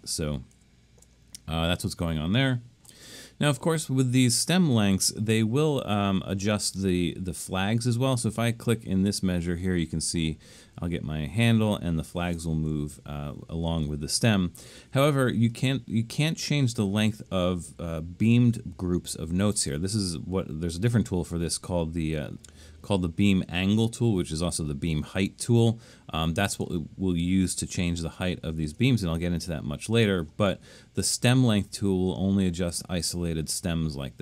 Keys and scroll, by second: 0.0 super+z, 0.5 super+z, 13.7 super+z.